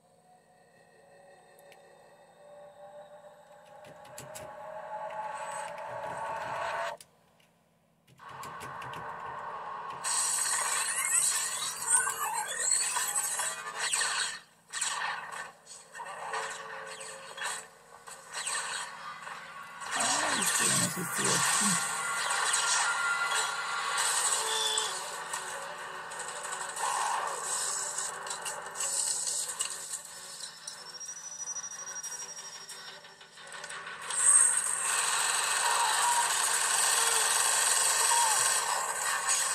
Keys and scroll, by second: 3.5-11.9 typing, 19.0 typing.